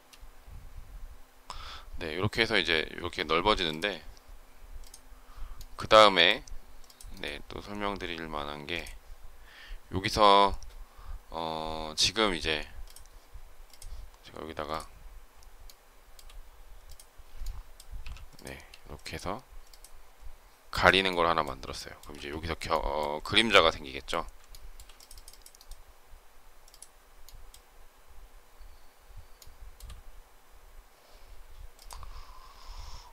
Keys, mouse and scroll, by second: 15.5 shift+middle click, 21.7 shift+middle click, 22.0 space, 24.4 shift+middle click, 29.3 shift+middle click.